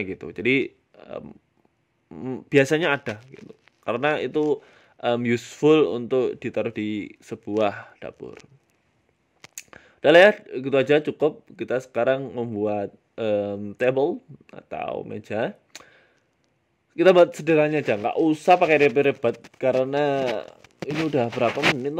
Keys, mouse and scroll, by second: 1.1 middle click, 1.8 middle click, 2.5 g, 3.9 middle click, 4.6 middle click, 5.0 KP_1, 5.5 shift+middle click, 5.7 shift+middle click, 6.0 shift+a, 9.8 shift+middle click, 10.1 s, 12.9 middle click, 13.5 s, 14.8 middle click, 15.6 middle click, 18.2 middle click, 18.5 shift+middle click, 18.8 Tab, 19.0 middle click, 19.5 middle click, 19.6 shift+middle click, 20.0 KP_7, 20.4 s, 21.5 middle click.